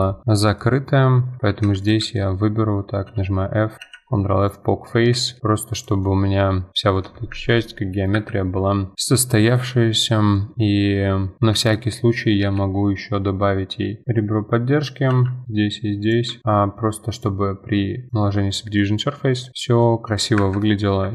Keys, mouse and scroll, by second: 0.2 middle click, 0.4 scroll up 2, 0.6 middle click, 1.5 2, 1.8 alt+click, 2.1 middle click, 3.1 f, 3.8 ctrl+f, 4.9 Tab, 5.3 middle click, 5.8 click, 6.0-6.7 middle drag, 6.7-7.3 scroll down 1, 7.3 F4, 7.6-8.1 middle drag, 8.1 F4, 8.4-8.7 scroll down 2, 8.7 middle drag, 8.9-9.3 scroll up 5, 9.3 middle click, 9.7 Tab, 10.4-12.3 middle drag, 14.0-15.1 middle drag, 15.1 ctrl+r, 16.3 Tab, 16.4-17.1 middle drag, 17.1-18.8 drag, 18.8 middle drag, 19.0-19.4 scroll down 4, 19.4 middle click, 19.6 scroll up 2, 19.8-20.4 middle drag, 20.4 F4, 20.6-21.0 middle drag, 21.0 F4.